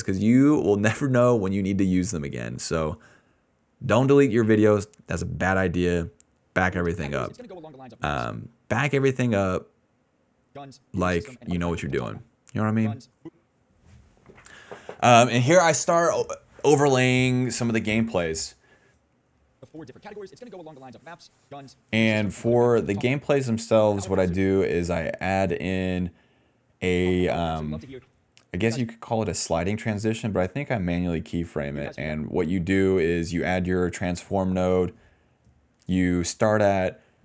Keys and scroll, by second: 2.8 i, 4.5-6.9 typing, 8.3 space, 9.0 a, 9.3 s, 10.4 space, 11.5 d, 12.2 space, 12.6 space, 13.2 space, 16.9 BackSpace, 19.4 ctrl+s, 19.5 space, 20.1 s, 23.4 space, 23.8 space, 24.2 space, 25.3-28.7 typing, 30.4 s, 31.5 space, 31.9 d, 32.1 space.